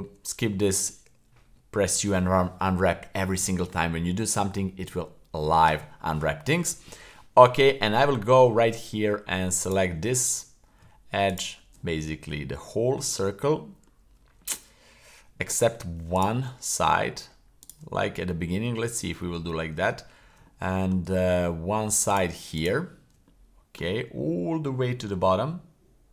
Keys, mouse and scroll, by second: 0.0 u, 6.3 middle click, 8.6 Tab, 9.6 right click, 11.3 alt+shift+right click, 12.6-13.9 middle drag, 14.4-15.4 middle drag, 16.1 shift+right click, 16.5-16.9 middle drag, 17.6 shift+right click, 17.9-18.7 middle drag, 19.0-19.4 shift+middle drag, 20.5-20.9 middle drag, 22.1 shift+right click, 22.5 shift+right click, 23.3-23.8 middle drag, 23.8 scroll down 1, 24.0-24.7 scroll up 2, 24.7-25.1 shift+middle drag.